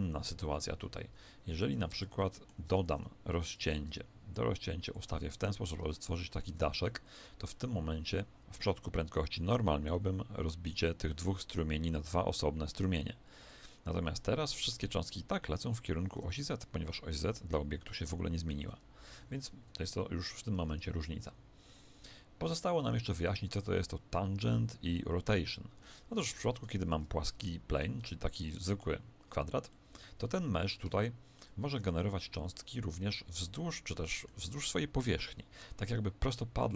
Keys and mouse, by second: 1.9 Tab, 2.2 middle click, 2.8 ctrl+r, 4.3 click, 5.5 KP_1, 5.8 Tab, 6.4 alt+a, 18.5 Escape, 19.6 KP_1, 26.3 ctrl+z, 26.9 Tab, 27.2-32.8 middle drag, 28.0 Tab, 33.4-36.7 middle drag.